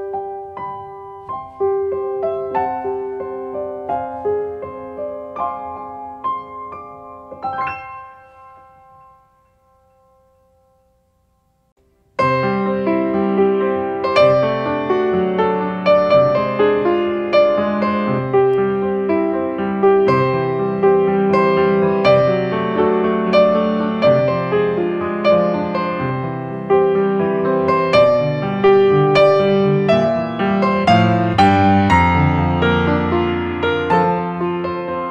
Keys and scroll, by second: 12.4 space, 18.7 ctrl+space, 20.7 ctrl+space.